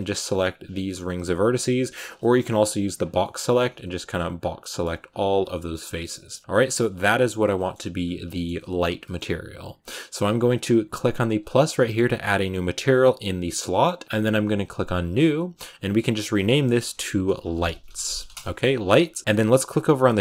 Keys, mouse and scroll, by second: 0.4 alt+shift+right click, 1.3 alt+shift+right click, 1.7 alt+shift+right click, 2.0 shift+middle click, 2.9 b, 3.1-4.2 middle drag, 4.2 b, 4.4 scroll up 1, 4.5 middle click, 5.1 b, 5.4 middle click, 5.6-6.0 scroll down 5, 6.0-8.4 shift+middle drag, 8.4-8.9 scroll up 1, 8.9-12.8 middle drag, 12.8-16.1 drag, 18.2-20.2 drag.